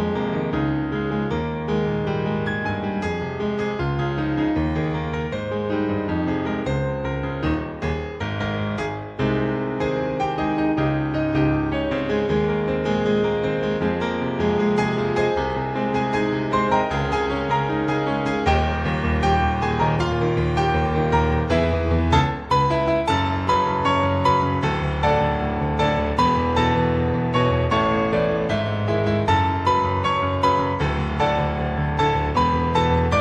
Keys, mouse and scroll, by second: 0.2 click, 3.2-4.4 scroll up 2, 4.9 scroll up 2, 5.3 click, 5.6-7.7 scroll up 9, 7.7 click, 9.2 click, 9.6 click, 13.4 click, 17.9 click, 20.1 click, 20.4-22.3 scroll down 10, 22.3 click, 26.0 scroll down 2, 26.3-27.6 scroll up 5, 27.6-28.1 scroll down 1, 28.4 middle click, 30.8 scroll down 2, 31.1 middle click, 32.4 scroll down 1, 32.7 shift+middle click.